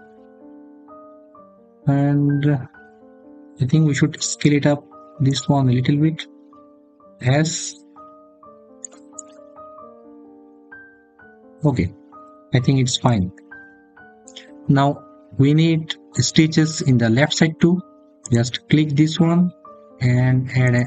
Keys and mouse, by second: 0.3 click, 7.1 s, 8.6 click, 8.9 click, 18.0 click, 20.5-20.8 drag.